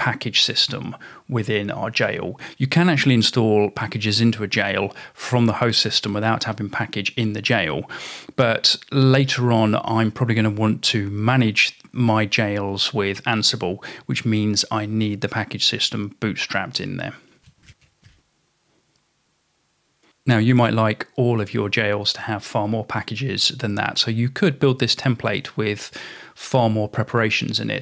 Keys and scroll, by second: 0.1 Tab, 2.1 typing, 16.6-19.9 typing.